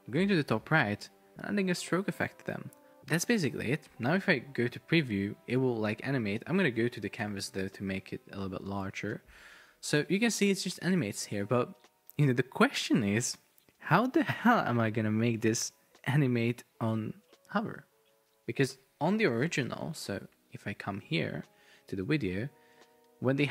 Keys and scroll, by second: 4.5 super+p, 5.7 Escape, 7.4 super+p, 10.4 super+r, 19.4 super+Tab.